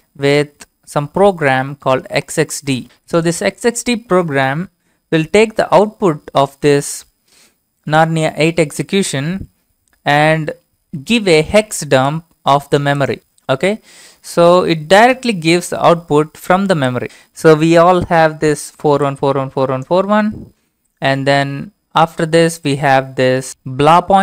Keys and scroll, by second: 0.0-1.6 typing, 2.7 typing, 15.2 Return.